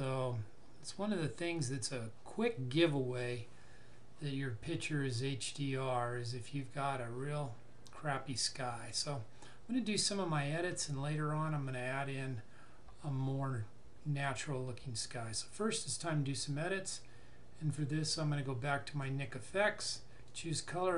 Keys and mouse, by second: 1.6 click, 18.0 click.